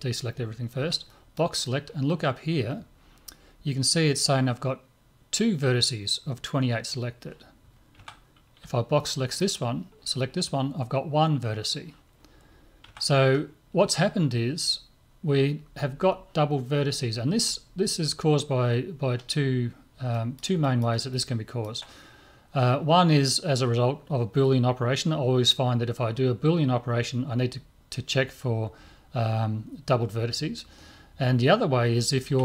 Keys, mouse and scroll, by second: 0.8 b, 8.0 a, 8.6 b, 12.8 a, 20.1-22.9 middle drag.